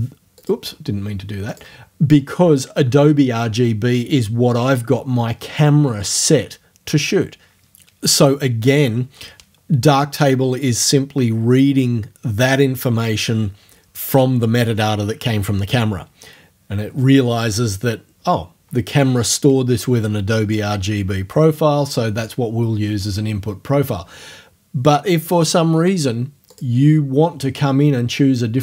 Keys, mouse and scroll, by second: 0.4 click, 1.5 click, 26.5 click.